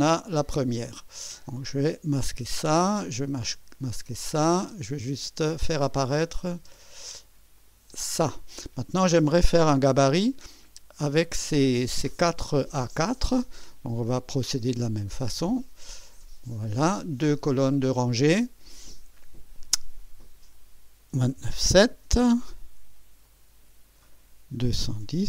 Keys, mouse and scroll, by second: 3.1 click, 3.5 space, 4.2 click, 4.7 space, 6.6 space, 6.8 click, 7.6 click, 8.0 space, 9.7 right click, 16.0 click, 20.0 click, 20.9-22.1 typing, 23.2 click, 24.3-25.2 typing.